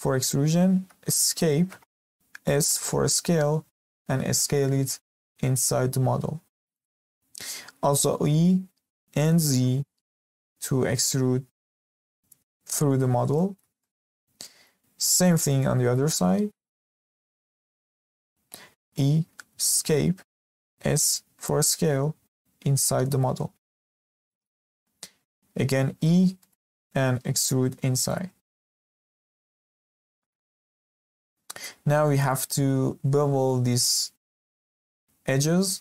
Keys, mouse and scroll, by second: 2.4 s, 7.9 e, 12.9-13.3 scroll down 3, 13.3-14.8 shift+middle drag, 14.8-15.3 scroll up 2, 15.3-16.6 shift+middle drag, 16.6 2, 17.2 alt+click, 18.6 e, 20.7 s, 24.6-25.8 middle drag, 25.8 e, 28.4-29.0 scroll down 2, 29.0-30.5 middle drag, 30.5-30.8 scroll up 3, 30.8-31.8 shift+middle drag, 31.8 scroll up 2, 32.0-35.8 shift+middle drag.